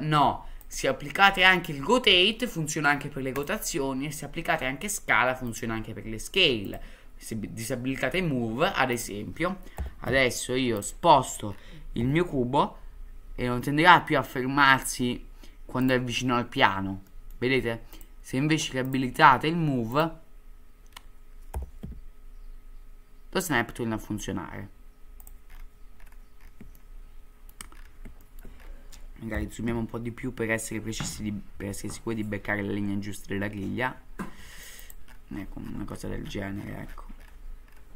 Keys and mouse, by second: 5.5-8.4 drag, 9.8 g, 12.0 g, 17.1 middle click, 18.0-19.1 drag, 19.9 click, 21.5 g, 26.7-27.5 shift+middle drag, 28.2 shift+middle drag, 29.3 g.